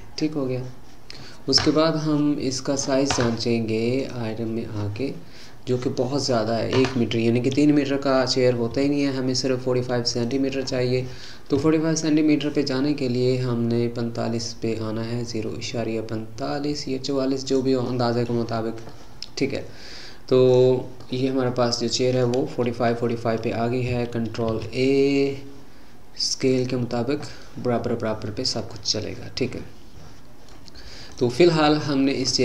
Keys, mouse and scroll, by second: 1.2-2.0 scroll up 5, 2.5 click, 4.0 click, 6.3-7.3 scroll up 4, 8.7 s, 10.6-11.7 scroll up 5, 11.7 s, 17.8 scroll up 1, 17.9-18.5 middle drag, 18.5-18.9 scroll up 5, 18.9-24.2 middle drag, 24.5 ctrl+a, 27.5-31.1 middle drag, 31.1 click, 31.7-32.3 scroll down 6, 32.3-32.4 middle drag.